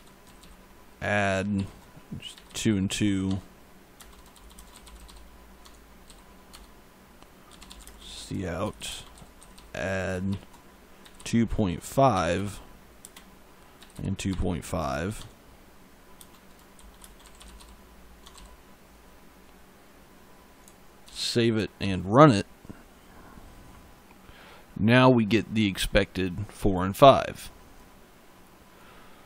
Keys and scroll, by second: 0.1 d, 1.4 shift+9, 2.2 2, 3.1 Tab, 3.8-5.9 typing, 5.4 Tab, 6.4 Return, 7.1-10.9 typing, 12.0-14.3 typing, 15.0 Tab, 16.0-18.2 typing, 18.1 Tab, 20.9 ctrl+s, 21.7 ctrl+F5.